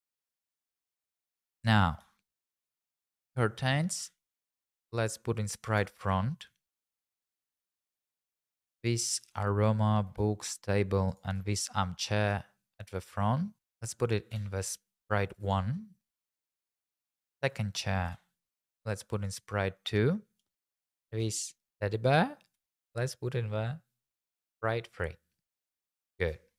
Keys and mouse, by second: 0.1 x, 0.3 click, 0.6 x, 1.8 click, 2.5 click, 4.0 m, 6.7 click, 7.1 shift+click, 7.9 click, 8.7 shift+click, 10.4 shift+click, 11.1 shift+click, 14.4 m, 17.0 click, 18.0 m, 19.8 middle click, 20.4 click, 22.6 m.